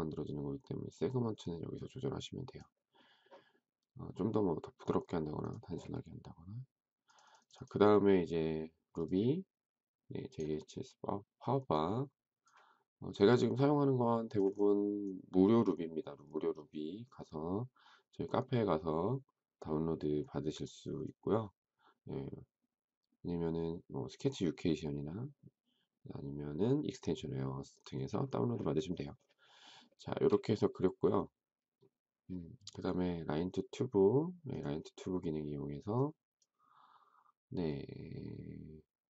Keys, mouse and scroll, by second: 29.8 shift+middle click.